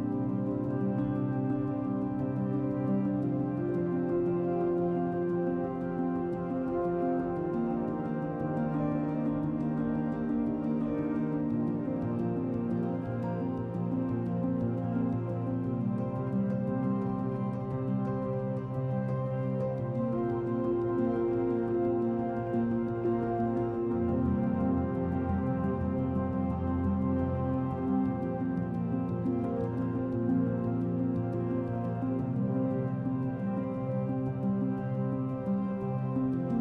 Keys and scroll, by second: 14.9 z.